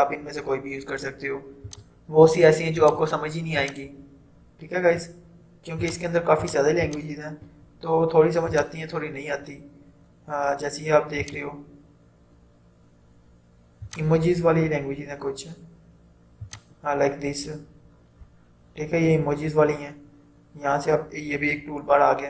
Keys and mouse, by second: 1.7-8.6 drag, 11.3 click, 14.0 click, 16.5 click.